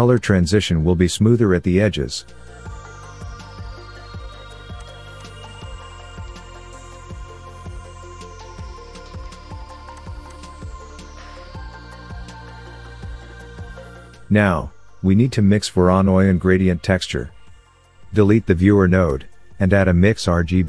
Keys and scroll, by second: 19.9 Delete.